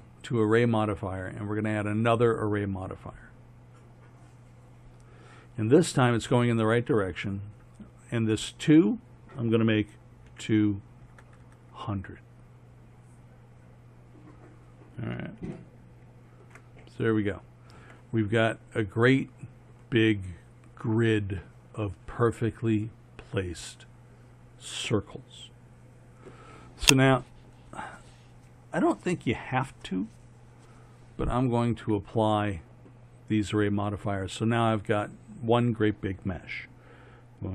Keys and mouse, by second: 1.8-3.0 middle drag, 11.4 KP_0, 21.5 middle click, 22.5-23.9 middle drag, 26.8-28.2 middle drag, 31.3-34.8 drag.